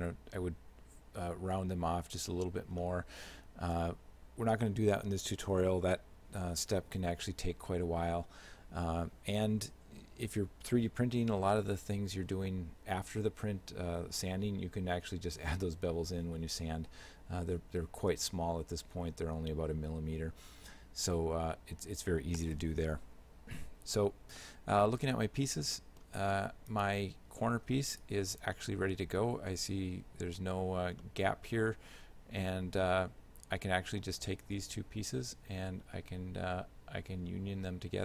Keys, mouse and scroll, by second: 2.9 shift+middle click, 24.4 shift+middle click, 25.8 middle click, 26.8 right click, 27.9 shift+right click, 28.6 shift+middle click, 31.1 shift+middle click.